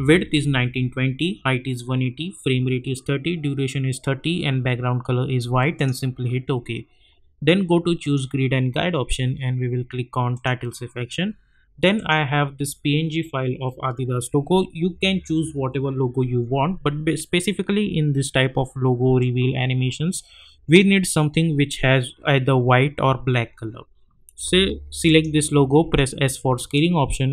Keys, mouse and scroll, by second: 0.0-0.1 typing, 5.7 click, 8.0 click, 10.3 click, 19.2-25.0 drag, 25.8 s, 26.7-27.3 drag.